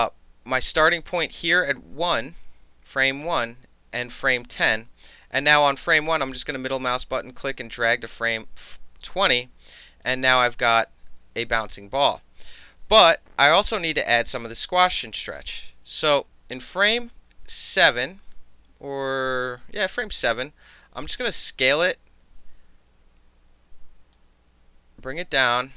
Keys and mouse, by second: 2.4-5.4 drag, 5.4-6.0 middle drag, 7.7-10.1 middle drag, 8.1 s, 10.1-17.6 drag, 19.9 r, 20.7-21.7 drag, 24.2-25.2 drag.